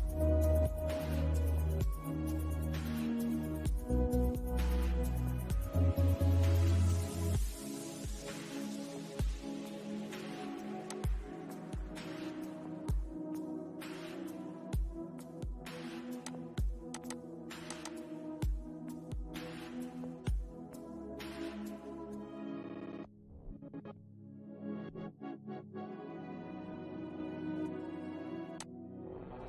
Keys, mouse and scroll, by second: 10.1 click, 15.5 click, 20.5-21.4 scroll up 1, 27.8-29.4 drag.